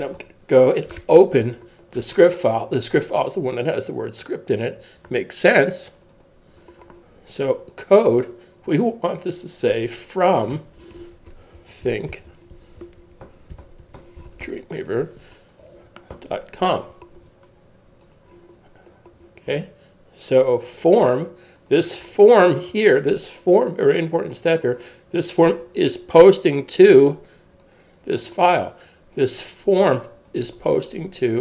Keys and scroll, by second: 1.4 super+o, 10.8-15.5 typing, 16.1 super+s.